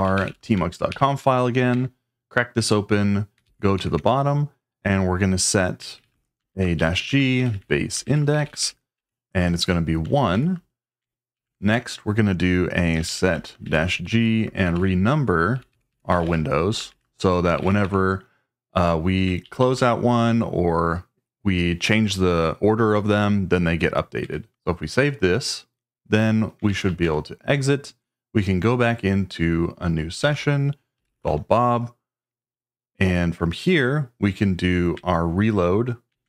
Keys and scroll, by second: 0.0-0.6 typing, 0.9 Tab, 1.7 Return, 3.2-4.2 typing, 5.5-10.3 typing, 11.3 ctrl+e, 11.7 Return, 12.7-18.3 typing, 19.4 ctrl+g, 19.6 ctrl+g, 24.2 Escape, 24.5 shift+;, 26.4-27.3 typing, 29.9-31.7 typing, 36.1 ctrl+a.